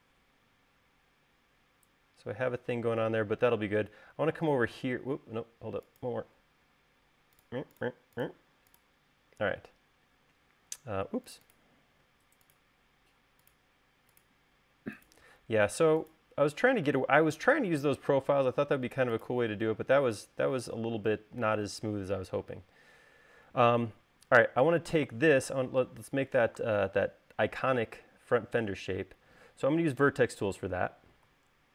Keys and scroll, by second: 12.1 l, 20.0 space, 31.6 v.